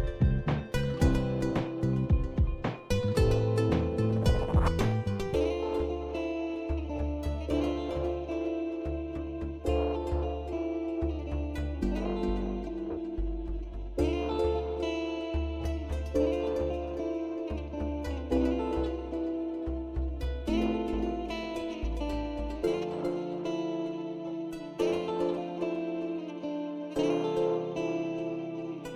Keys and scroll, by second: 6.3 alt+Tab, 25.6-28.6 typing.